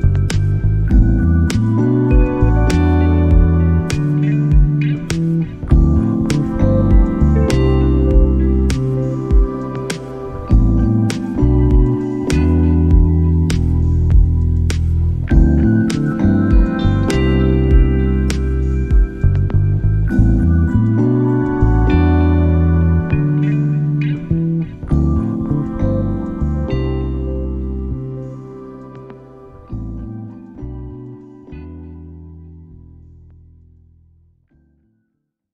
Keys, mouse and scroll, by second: 0.0 middle click, 0.8-3.3 middle drag, 3.3 g, 6.9 middle click, 7.6 middle click, 11.1 middle click, 11.9 right click, 12.4-15.3 middle drag, 15.3 g, 16.0-17.9 middle drag, 24.4 x.